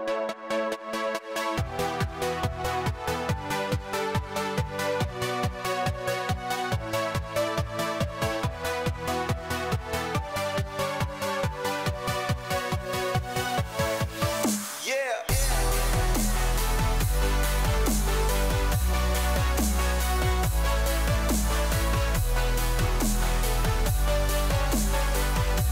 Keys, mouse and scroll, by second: 1.7-3.0 scroll up 3, 3.0-12.1 scroll up 1, 12.1 click, 22.3 z.